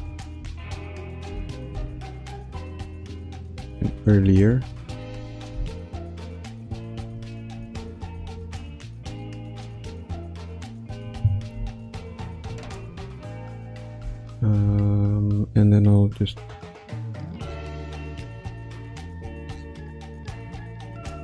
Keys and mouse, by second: 0.3 space, 0.9 click, 1.7 space, 2.1 click, 3.1-3.4 drag, 3.8 g, 6.5 ctrl+alt+middle drag, 7.1 click, 7.5 space, 8.1 space, 8.7-10.5 drag, 11.5 i, 12.6 ctrl+s, 14.1-15.6 shift+middle drag, 16.8-21.2 drag.